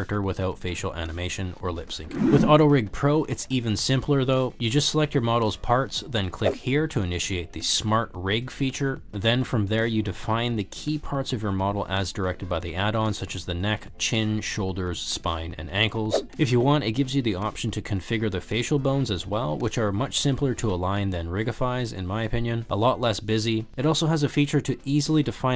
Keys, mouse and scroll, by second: 0.0-1.9 typing, 0.1 click, 0.4 click, 0.7 click, 1.8 click, 4.5 drag, 6.2 shift+click, 7.9-8.6 drag, 9.5 click, 12.4 click, 13.4 click, 13.8 click, 15.1 click, 15.7 click, 18.7 click, 20.0 click, 20.1-25.5 typing, 21.3 click, 22.1 click, 22.7 drag, 23.2 click, 24.3 click, 24.6 click, 25.3 click.